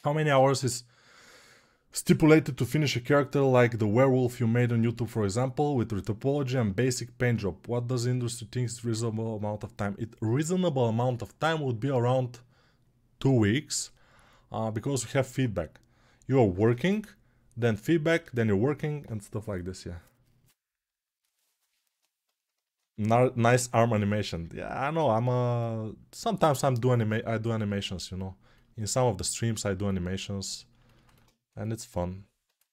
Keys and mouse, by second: 27.6-32.7 ctrl+alt+right drag.